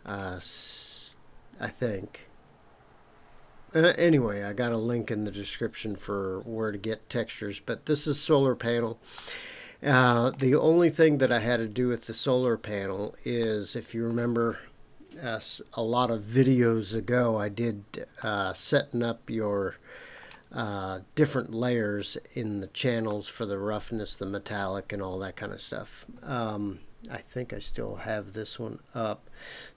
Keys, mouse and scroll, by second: 9.1-10.3 middle drag, 12.8-13.4 scroll down 1, 13.4 middle click, 14.1 scroll up 1, 18.2-20.2 middle drag, 23.1-24.4 middle drag.